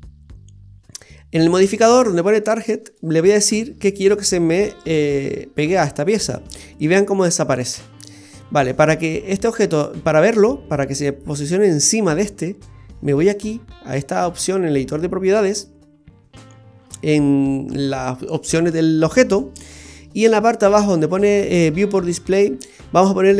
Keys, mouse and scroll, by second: 2.9 click, 7.4 middle click, 13.3 click, 19.9-21.8 scroll down 7.